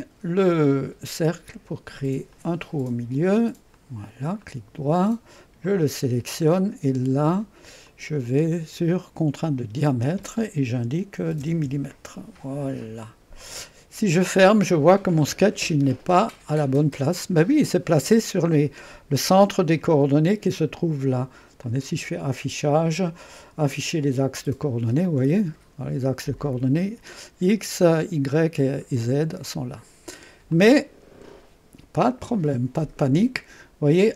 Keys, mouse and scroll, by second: 0.0 click, 2.3 click, 3.8 click, 4.5 click, 5.7 click, 7.9 click, 9.4 click, 11.0-11.9 typing, 13.4-17.1 drag, 15.4 typing, 17.4 click, 21.6 click, 24.2 click, 25.1-26.8 drag, 28.0 click, 29.5 click, 30.6 click.